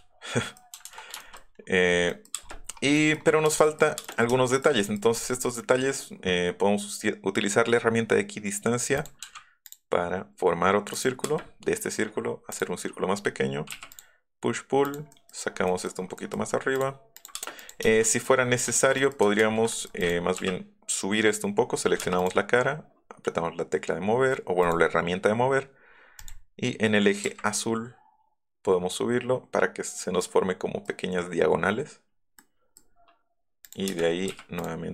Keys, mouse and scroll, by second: 0.5 shift+middle click, 1.3 middle click, 1.8 middle click, 2.2 space, 2.4 middle click, 2.9 click, 3.1 middle click, 3.6 click, 3.8 middle click, 4.0 space, 4.3 shift+click, 4.3 `, 4.6 middle click, 4.9 middle click, 5.5 scroll up 1, 8.9 click, 9.6 click, 10.9 click, 11.4 middle click, 12.5 click, 13.9 click, 14.8 click, 15.1 middle click, 15.3 middle click, 15.6 scroll down 2, 15.8 scroll up 2, 16.2-16.5 scroll down 2, 16.5 scroll up 2, 17.3 space, 18.0 middle click, 18.3 middle click, 18.7 ctrl+z, 19.4 ctrl+z, 20.0 click, 20.4 m, 22.0 space, 22.1 click, 24.6 click, 24.6 e, 26.2 click, 27.2 Up, 30.4 middle click, 32.4 click, 33.6 click, 33.8 space, 34.6 click.